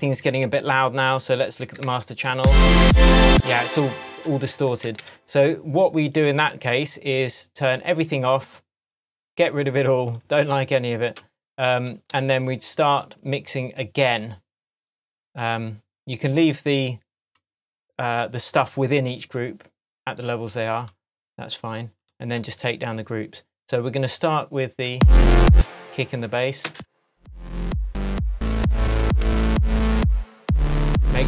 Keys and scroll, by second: 0.5 shift+Tab, 1.7 shift+Tab, 2.3 space, 3.7 Tab, 5.0 super+s, 24.9 space, 26.7 space, 29.2 Tab.